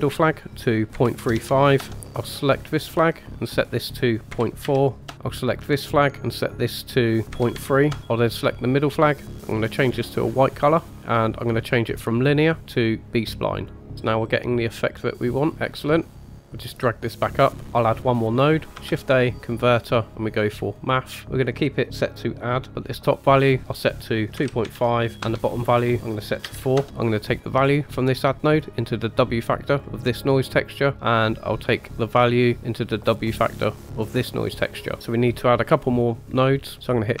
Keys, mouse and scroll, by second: 0.2-1.7 drag, 3.7-5.0 drag, 5.7 click, 6.3-7.9 drag, 8.5 click, 9.4 click, 12.5-13.7 drag, 13.9-16.0 middle drag, 13.9-14.2 scroll down 3, 16.1 scroll down 3, 16.2 middle click, 16.4 KP_5, 16.5-17.6 drag, 17.6 shift+a, 18.6 shift+scroll up 1, 18.7 shift+a, 22.6 scroll up 2, 22.9 middle click, 23.6-26.8 drag, 26.8-29.8 drag, 26.8 middle click, 29.8-30.3 middle drag, 30.3 click, 30.9-31.9 middle drag, 31.9-34.2 drag, 34.2-36.3 middle drag, 36.3-37.2 scroll up 3.